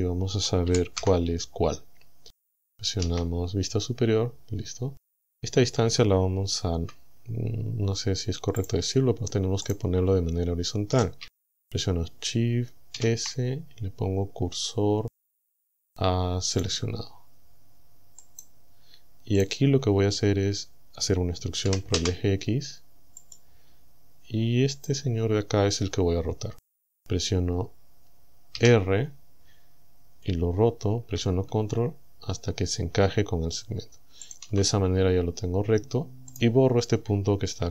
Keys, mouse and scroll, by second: 0.7 e, 1.0 Return, 3.1 KP_1, 5.3 right click, 6.8 Tab, 8.6 click, 9.7 right click, 13.0 shift+s, 16.6 click, 18.3 right click, 19.4 right click, 21.7 e, 22.1 x, 23.3 click, 24.8 right click, 28.6 r, 34.3 ctrl+click, 36.3 right click.